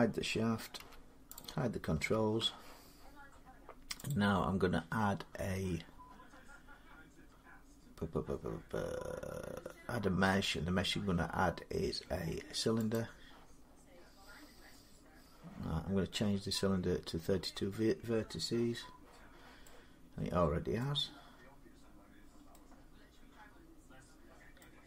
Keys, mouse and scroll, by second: 0.6 h, 1.2 click, 1.8 h, 3.9 click, 12.8 click, 13.5-15.4 scroll, 17.9-19.6 middle drag, 20.6-22.5 middle drag, 24.4 middle click.